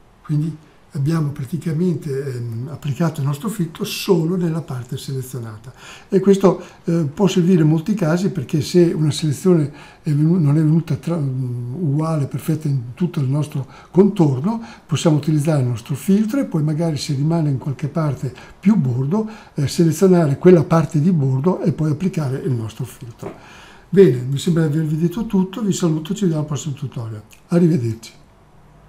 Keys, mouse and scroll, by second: 0.1 click.